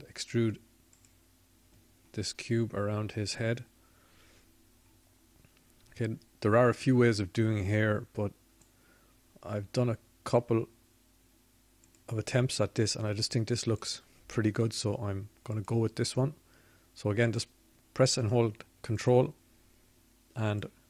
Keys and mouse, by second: 7.9-8.9 middle drag, 12.7 middle click.